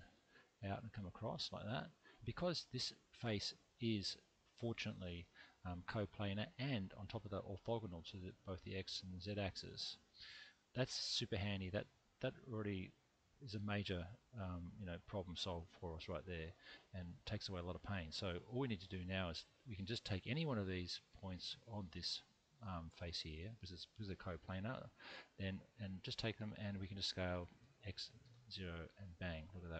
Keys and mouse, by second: 0.1 x, 1.2 click, 2.7-3.8 drag, 20.2 click, 20.9 click, 21.7 click, 25.7 click, 27.3 s, 27.6 x, 28.2 0, 28.9 click, 29.4-29.7 middle drag.